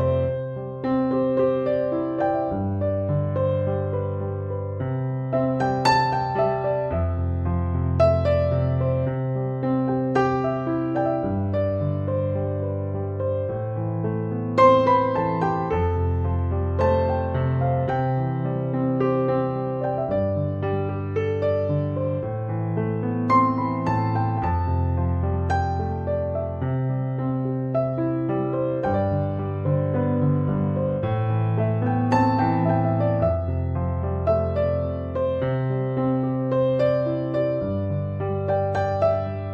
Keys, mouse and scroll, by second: 5.4 Return, 12.0 4, 12.5 ., 12.6 2, 12.7 5, 13.0 Return, 27.1 1, 27.3 2, 27.4 Return.